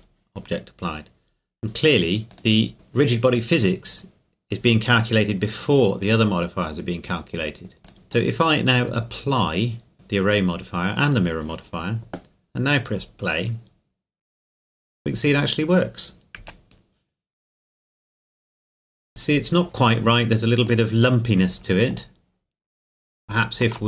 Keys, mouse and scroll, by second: 2.3 click, 7.8 click, 9.9 click, 15.4 scroll down 1, 16.4 KP_1, 20.6 click.